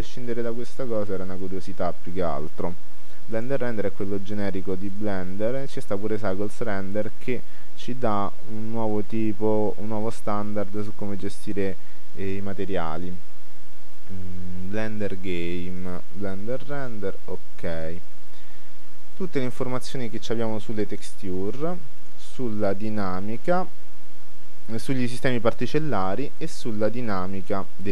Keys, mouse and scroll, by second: 0.3-2.1 drag, 5.0-6.6 drag, 11.7 click, 12.3-13.9 drag, 14.1 click.